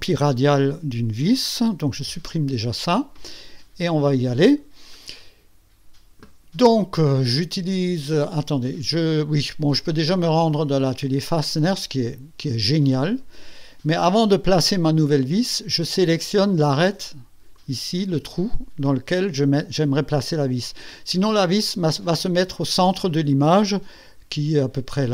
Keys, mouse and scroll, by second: 2.0 Delete, 8.5 click, 9.9 click, 11.2 click, 17.5 click.